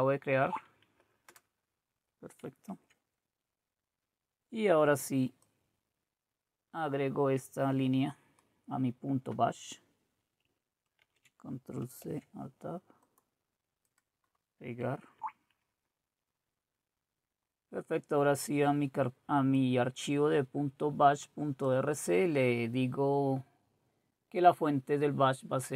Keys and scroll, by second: 0.4 Right, 1.3 Return, 2.6 alt+Tab, 11.0 ctrl+c, 12.1 alt+Tab, 15.2 Right.